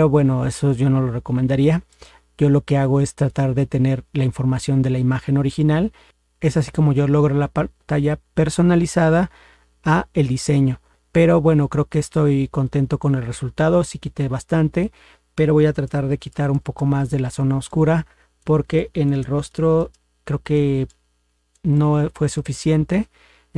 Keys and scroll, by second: 15.9 ctrl++, 19.9 ctrl++.